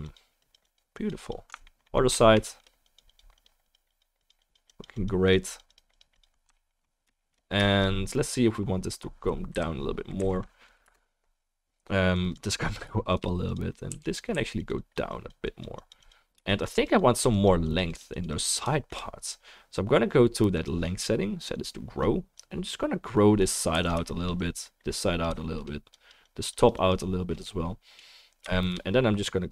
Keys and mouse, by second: 2.4-6.6 shift+middle drag, 7.1-8.5 shift+drag, 7.1-8.5 shift+right drag, 7.2-8.5 shift+middle drag, 9.5 Down, 10.2 Left, 10.8 KP_0, 14.0 click, 14.0-28.5 middle drag, 14.0-28.5 right drag, 14.0 f, 14.3 f, 14.8-21.6 drag, 22.3-23.9 drag, 23.8 f, 24.4-29.5 drag.